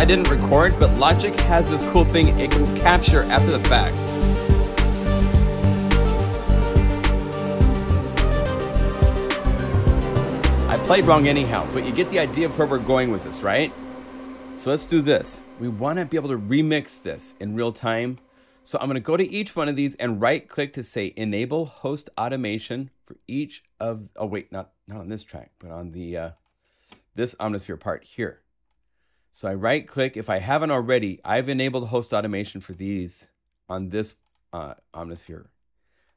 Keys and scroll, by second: 11.0 0.